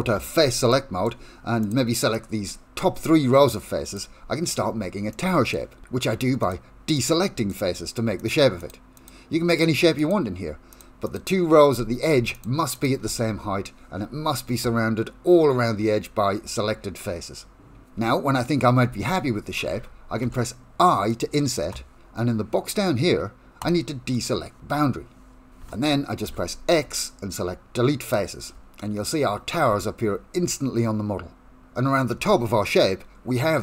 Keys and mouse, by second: 0.4 3, 0.7 middle click, 2.1-4.0 drag, 5.1 middle click, 6.9 shift+click, 7.5 shift+click, 8.2 shift+click, 8.6 shift+click, 8.9 shift+click, 9.5 shift+click, 10.0 shift+click, 11.1 shift+click, 12.3 shift+click, 12.7 shift+click, 20.3 i, 26.3 x, 28.7-32.2 middle drag.